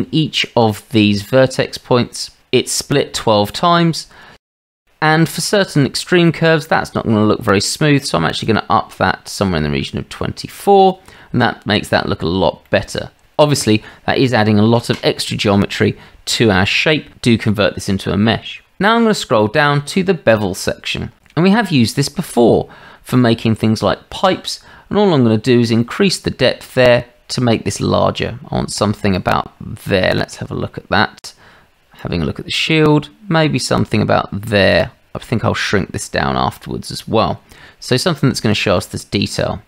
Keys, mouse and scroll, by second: 0.6 Tab, 8.4-10.9 drag, 12.2-13.0 middle drag, 21.2-21.6 shift+middle drag, 25.8-29.2 drag, 32.0-34.7 drag, 38.4-38.8 shift+middle drag.